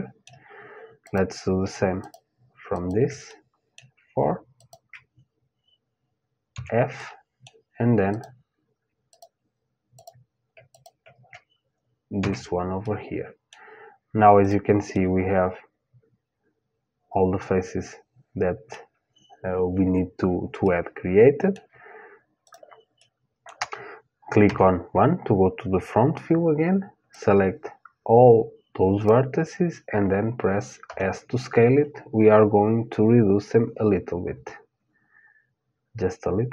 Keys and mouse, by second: 0.7-6.2 drag, 6.1 f, 6.6-8.7 middle drag, 7.7-12.4 drag, 11.8 f, 12.4-14.4 middle drag, 14.0-16.1 drag, 14.5 middle click, 16.1 middle click, 20.2-22.0 middle drag, 22.0-24.1 drag, 24.1 middle click, 24.1 KP_1, 26.7-28.7 drag, 30.5 s.